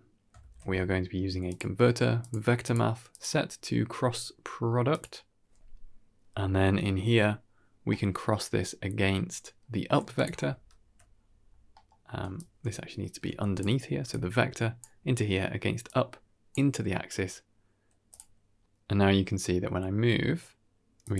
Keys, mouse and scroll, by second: 0.3 shift+a, 3.0-4.9 drag, 7.8-9.5 middle drag, 10.0 click, 11.6 middle drag, 12.3-13.5 alt+drag, 13.5 typing, 14.0-14.7 drag, 15.8-16.5 drag, 17.7 KP_1, 17.8 g.